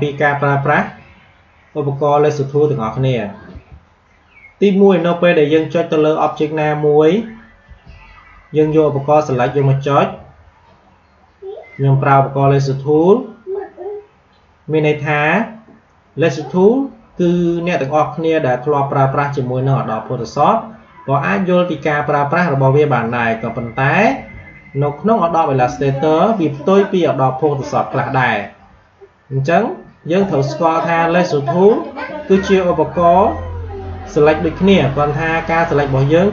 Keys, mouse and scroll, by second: 3.4 q, 6.2 click, 7.6 v, 9.2 click, 12.2 q, 28.6 alt+Num_Lock, 28.7 alt+scroll up 1, 30.1 space, 30.3 click, 30.5 space, 35.4-36.3 drag.